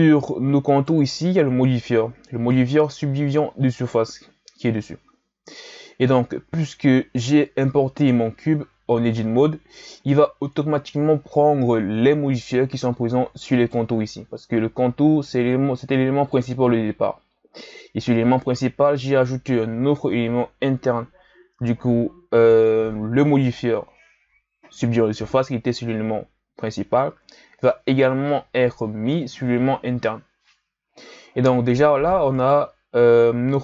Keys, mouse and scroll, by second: 0.7 right click, 2.5-5.8 drag, 13.5 right click, 32.3 right click.